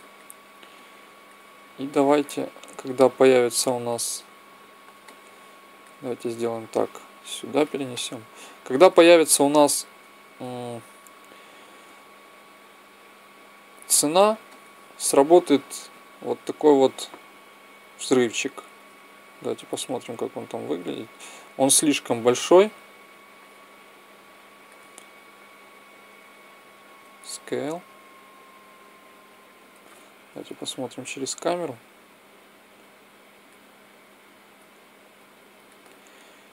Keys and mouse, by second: 0.5 click, 3.6 click, 6.4-7.9 drag, 7.9 middle click, 9.8 KP_1, 11.7 s, 15.1-17.0 drag, 18.8-22.2 drag, 24.0-25.8 drag, 26.8 s, 30.2 KP_0, 32.7 click.